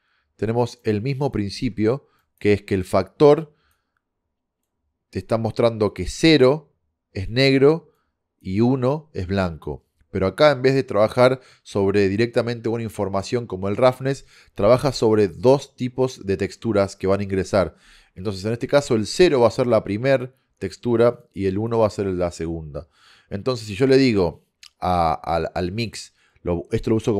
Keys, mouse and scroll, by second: 1.4-3.0 drag, 14.7-16.5 drag.